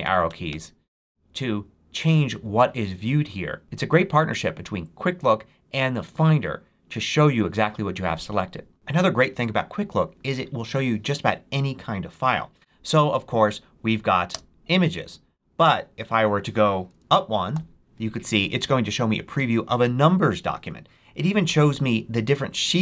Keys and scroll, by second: 0.6 shift+Down, 14.2 space, 17.4 Up.